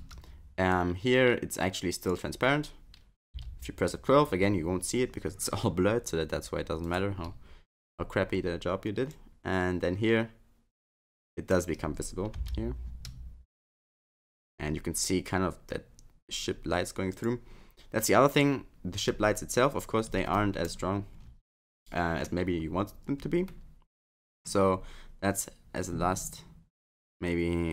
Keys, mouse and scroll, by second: 0.0 space, 0.8 click, 6.9 F12, 9.1 click, 17.2 F12, 18.3 click, 20.3 middle click, 20.8-21.6 scroll down 9, 21.6 middle click, 23.4 middle click, 25.3 click, 26.1-27.4 scroll up 3.